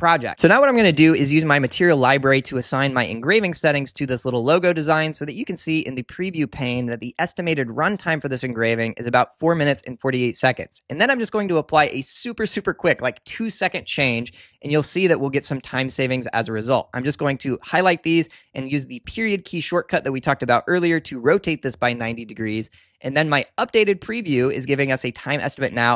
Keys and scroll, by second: 19.0 ., 19.2 •.